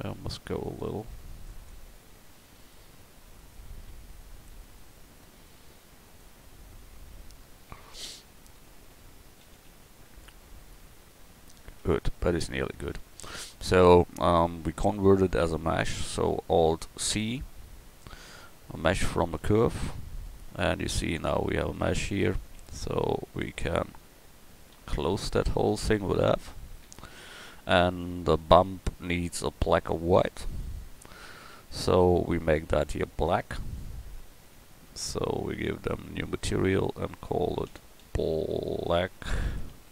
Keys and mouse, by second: 3.5-5.5 drag, 6.8 click, 7.2 Tab, 9.5 ctrl+z, 9.7 ctrl+z, 11.8 Tab, 12.8 Tab, 17.1 alt+c, 20.3 Tab, 22.6 Tab, 23.7 Tab, 24.7 a, 26.2 f, 26.9 Tab.